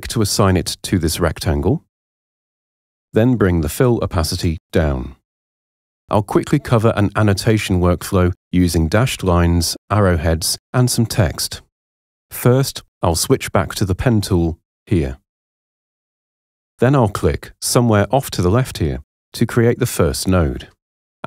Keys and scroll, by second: 8.6 super+0.